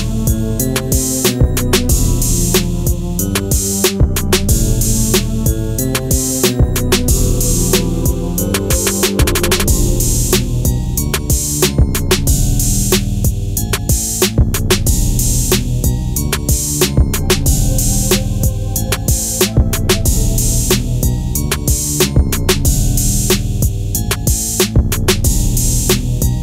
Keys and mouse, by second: 7.9 click, 8.7-9.5 drag, 12.8 n, 15.6 click, 16.2 click, 16.9 click, 17.6-19.9 drag, 21.1 click, 22.0-23.9 drag.